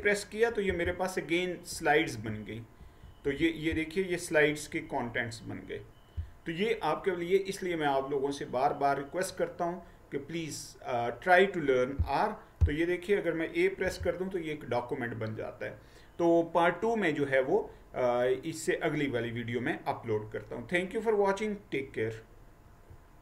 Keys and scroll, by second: 0.8 Down, 0.8 a, 1.8 Right, 2.4 Right, 3.8 Down, 14.0 a.